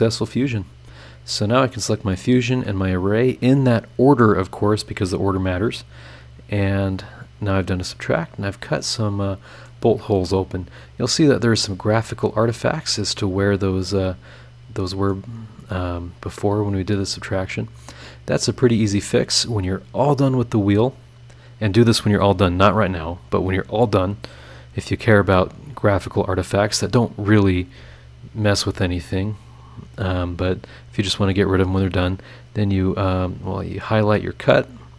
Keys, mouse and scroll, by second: 0.0 click, 2.2 ctrl+click, 5.6 click, 7.7-8.1 scroll down 2, 8.2 scroll up 2, 8.8 scroll up 2, 8.9 middle click, 9.0 click, 9.8 scroll down 1, 10.2-10.8 scroll up 2, 12.4 click, 13.0-15.3 drag, 16.5-17.2 scroll down 2, 17.5 scroll up 2, 18.0-18.7 scroll down 4, 19.2 click, 19.6 middle click, 20.5 scroll up 2, 24.2 click, 33.3 click, 33.8 click.